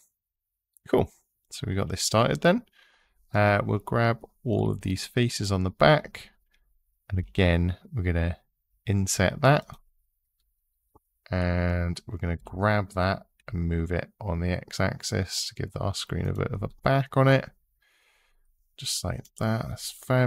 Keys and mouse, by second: 3.1 click, 6.9 i, 12.1 g, 13.2 x, 16.0 click, 19.0 click.